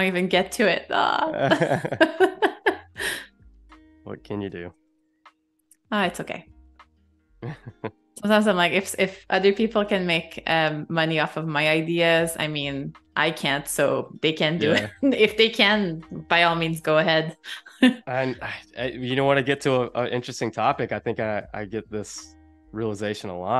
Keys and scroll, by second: 0.4 shift+m, 2.0 super+z, 2.8 a, 4.6 super+c, 5.0 super+z, 6.0 BackSpace, 7.0 super+f, 8.2 i, 12.4 -, 19.5 z, 21.0 a, 23.0 space.